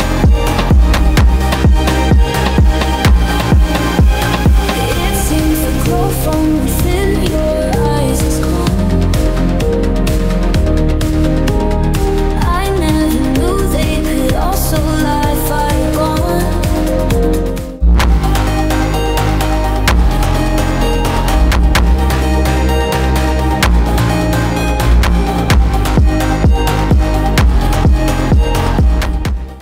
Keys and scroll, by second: 4.6 ctrl+0, 10.1 space.